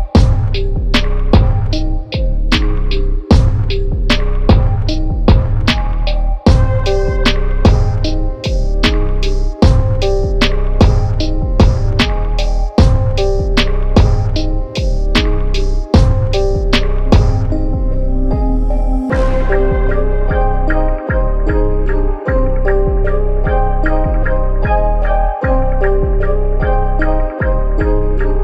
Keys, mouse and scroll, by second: 0.2 Tab, 0.5 click, 6.6 KP_5, 6.8 KP_0, 8.3 click, 10.4 click, 10.7 click, 14.7 click, 18.5 click, 19.2 click, 19.3 KP_0, 19.7 Tab, 21.1 click, 26.7 click, 27.0 KP_5, 27.2 KP_0, 27.5 Tab, 27.8 KP_0, 28.3 Tab.